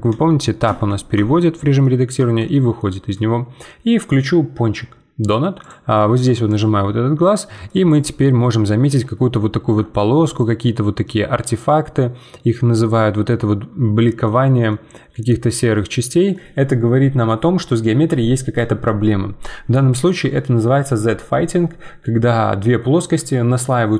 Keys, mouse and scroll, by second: 0.1 Tab, 1.8 middle click, 2.2 Tab, 2.5-5.6 middle drag, 5.6-7.2 drag, 7.2 middle click, 7.9 click, 8.4-13.5 middle drag, 14.7-17.8 middle drag.